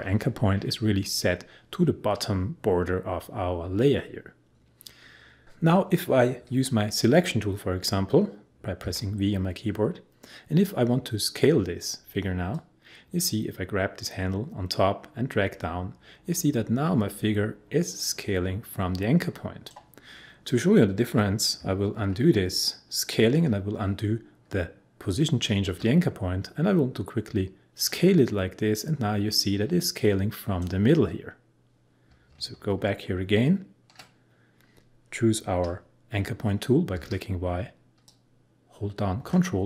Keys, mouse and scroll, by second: 8.8 v, 12.5-21.9 drag, 21.9 ctrl+z, 27.9-32.7 drag, 32.7 ctrl+z, 36.9 y, 38.1-39.6 drag.